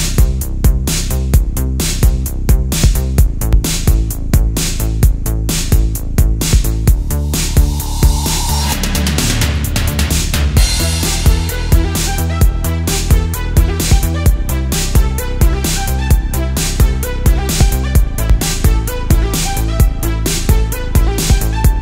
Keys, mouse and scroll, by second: 1.8 ctrl+z, 2.5 middle click, 3.2 Tab, 6.1-7.0 middle drag, 7.0 middle click, 11.2 middle click, 14.6-15.6 drag, 15.9 Tab, 17.6 e, 20.2 click, 20.6 middle click.